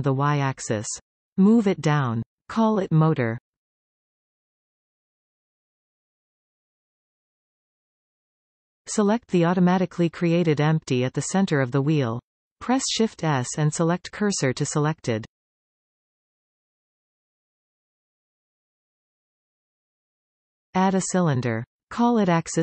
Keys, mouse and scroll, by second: 0.4 click, 1.0 r, 2.1 Return, 2.7 g, 4.0 click, 5.2-8.2 ctrl+drag, 6.8 Return, 7.9-8.2 scroll down 1, 8.2-12.4 middle drag, 9.6 shift+a, 12.4 click, 15.7 shift+s, 18.7 shift+a, 22.5-22.6 ctrl+drag.